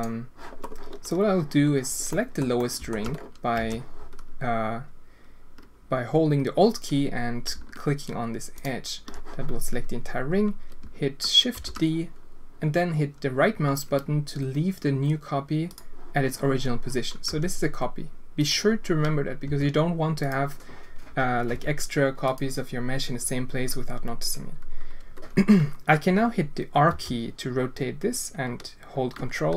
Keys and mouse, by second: 2.1 click, 2.6 click, 2.8 alt+shift+click, 3.6 alt+a, 11.5 shift+d, 17.2 g, 19.4 g, 26.9 r.